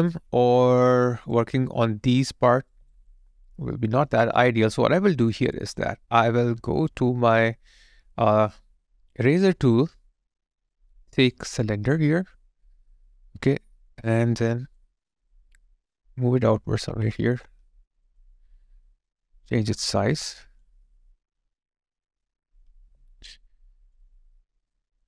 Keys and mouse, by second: 0.8 alt+right click, 3.1 alt+click, 4.5 alt+right click, 4.8 alt+click, 5.5 alt+right click, 12.0 alt+right click, 18.1 ctrl+click, 22.8 alt+right click, 23.7 alt+click.